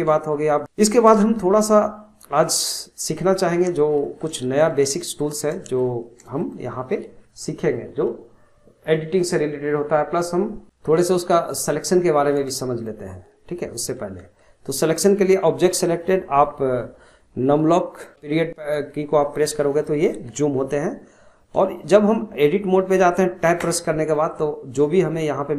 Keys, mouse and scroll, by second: 0.3-0.6 shift+middle drag, 0.6 shift+a, 1.8-3.4 shift+middle drag, 3.4 scroll down 1, 3.6-9.5 shift+middle drag, 10.6-11.1 shift+middle drag, 11.1 shift+scroll up 1, 11.3-13.2 shift+middle drag, 13.2-14.4 scroll up 1, 14.4-17.5 shift+middle drag, 18.1 KP_Decimal, 21.0-21.3 scroll up 2, 21.8-23.6 shift+middle drag, 23.6 Tab, 24.1 scroll down 2, 25.0 shift+middle click.